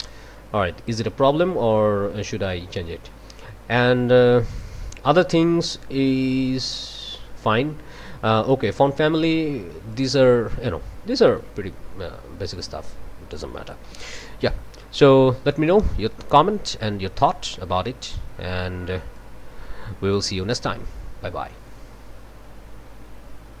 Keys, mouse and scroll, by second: 0.0 click, 0.9 scroll down 1, 4.5 click, 7.5 scroll down 2, 8.5 click, 9.9 click, 11.2 click, 12.5 click, 13.9 ctrl+z, 15.5 click, 16.7 scroll up 2, 17.2-17.7 drag, 19.1-20.3 drag, 20.3-23.6 scroll down 2.